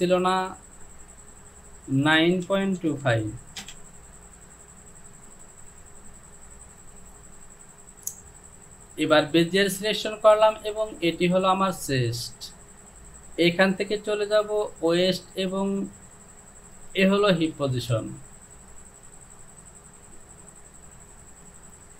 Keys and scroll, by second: 2.2 KP_9, 2.5 KP_Decimal, 2.8 KP_2, 3.1 KP_5, 3.7 Return.